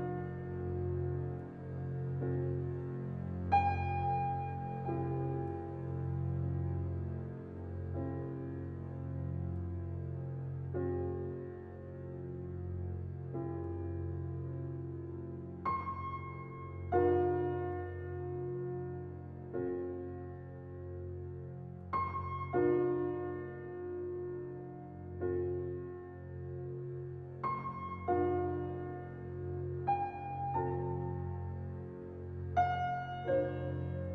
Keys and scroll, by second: 15.3 ctrl+g, 29.1 typing.